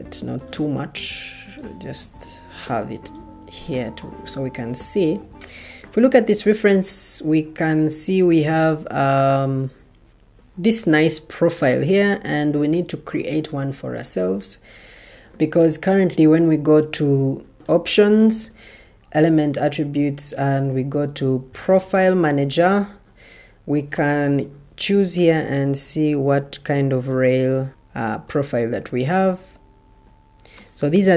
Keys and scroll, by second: 2.7 ctrl+d, 8.2 Escape, 27.0 r.